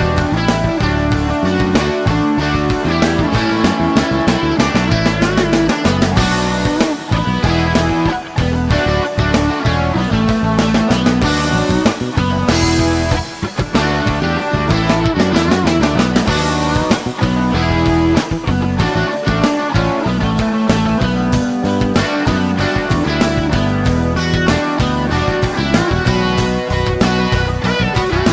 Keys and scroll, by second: 10.9 Return, 13.7 Return.